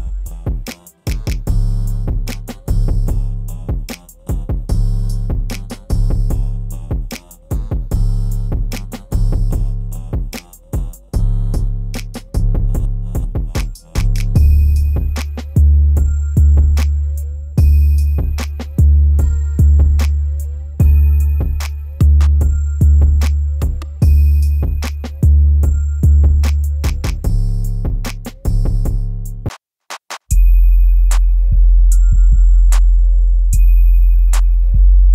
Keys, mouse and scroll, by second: 0.4-0.9 scroll down 1, 1.2 ctrl+z, 1.9 ctrl+z, 2.4 ctrl+z, 3.0 ctrl+z, 4.3 ctrl+shift+z, 4.9 click, 5.3 scroll down 1, 9.5-10.1 scroll down 1, 12.3 click, 13.0 scroll up 1, 14.8-16.7 drag, 16.7 right click, 17.2-18.1 scroll up 1, 18.1 scroll down 1, 19.1-23.2 shift+drag, 23.2 shift+click, 24.3-25.0 scroll down 1, 25.0 click, 25.6 scroll down 1, 26.7-29.4 drag, 29.4 right click, 30.0 scroll up 1, 30.6-31.9 scroll down 1, 31.9 click, 33.3-35.1 shift+drag.